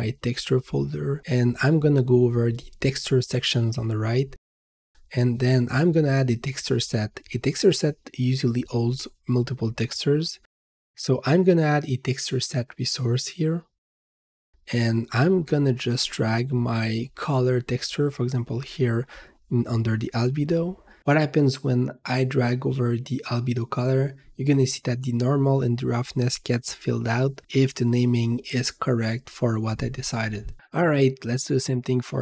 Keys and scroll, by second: 28.6-29.8 typing, 31.9-32.2 typing.